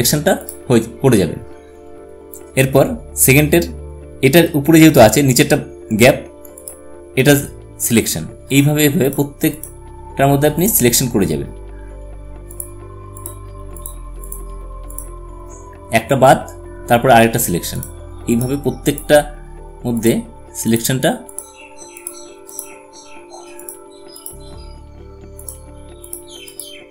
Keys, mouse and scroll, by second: 6.3 click, 17.4 click.